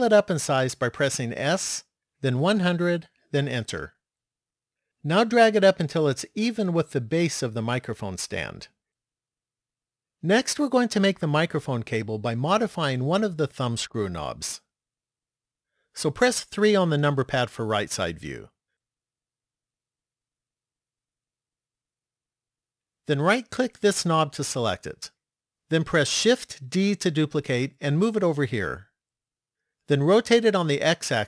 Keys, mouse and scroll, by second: 1.3 s, 6.0 click, 16.6 KP_3, 19.3 shift+middle click, 23.6 right click, 26.5 shift+d.